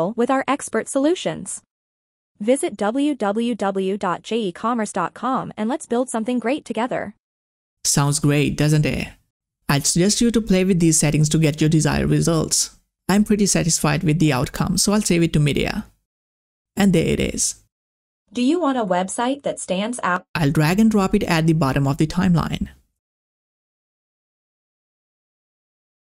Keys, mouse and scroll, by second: 15.1 click, 19.8-26.1 drag.